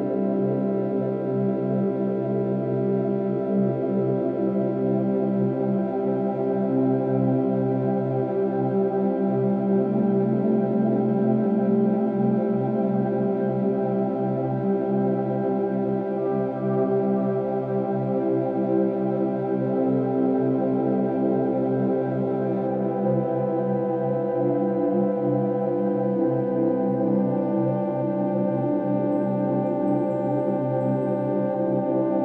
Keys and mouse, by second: 0.0-1.8 drag, 2.4-3.1 drag, 4.5-5.3 drag, 6.3-7.4 drag, 8.8-11.5 ctrl+alt+drag, 11.6 g, 11.9 z, 13.3 click, 14.7-15.2 alt+shift+drag, 15.8 click, 16.0-16.6 alt+shift+drag, 16.9-18.7 drag, 18.9-19.3 alt+shift+drag, 20.1 click, 22.9-23.9 drag, 24.2-25.0 drag, 25.5-27.2 drag, 29.1 click, 29.6 ctrl+alt+click, 30.1 ctrl+alt+shift+drag, 30.7 alt+shift+drag, 31.3-32.2 ctrl+alt+drag.